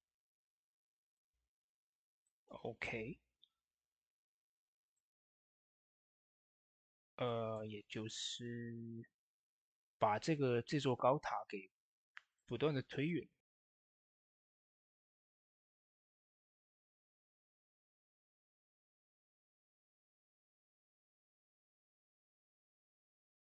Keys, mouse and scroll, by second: 0.9 click, 1.5 middle click, 2.1 middle click, 4.7 middle click, 4.7-5.4 typing, 4.7 click, 6.4 click, 7.6 Tab, 8.0 middle click, 11.0 middle click, 11.0 typing, 12.2-16.0 drag, 16.0 ctrl+a, 16.7 click, 17.5 Tab, 18.0 shift+middle click, 18.4-21.6 drag, 21.6 Tab, 21.9 click, 23.3 s.